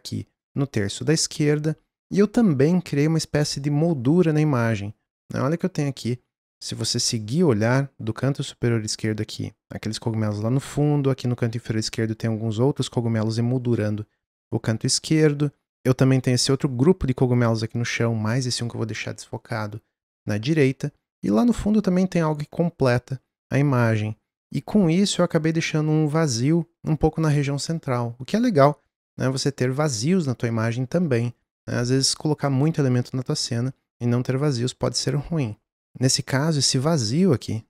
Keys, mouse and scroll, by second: 36.3-37.6 drag.